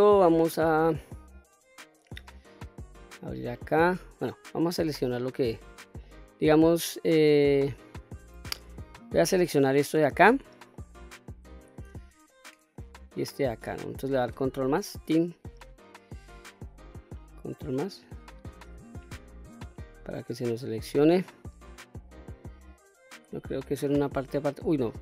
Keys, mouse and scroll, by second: 2.5 click, 4.5 click, 5.0-5.4 scroll up 2, 5.4-5.8 middle drag, 7.1 scroll down 1, 8.2 click, 9.1-9.5 scroll up 1, 10.1-10.6 shift+middle drag, 12.1-12.5 middle drag, 13.0 shift+click, 13.5 middle click, 14.8 ctrl+KP_Add, 17.7 ctrl+KP_Add, 19.6-22.9 middle drag, 23.8 l.